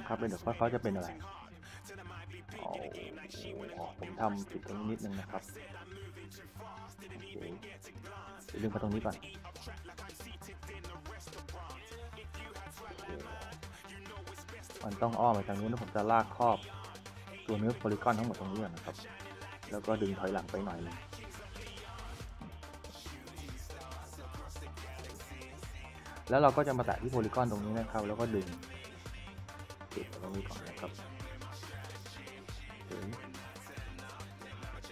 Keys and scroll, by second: 0.0 d, 8.8-9.6 typing, 12.6 e, 14.3 s, 16.5-17.5 typing, 22.2-23.2 typing, 24.3 w, 24.7 d, 25.9 q, 27.4 s, 30.9-31.8 typing.